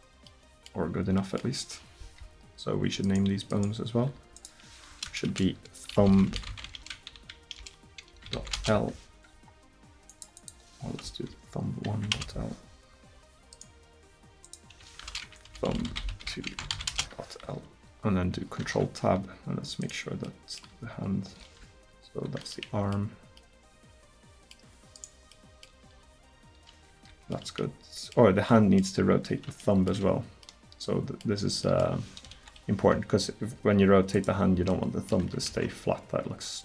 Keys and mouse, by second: 3.1-4.4 right drag, 6.3-10.1 middle drag, 11.3 Left, 13.6 click, 14.5 middle click, 18.7 ctrl+Tab, 20.3 click, 20.7 r, 25.9 r, 32.3 KP_1, 33.4 r, 35.5 ctrl+z.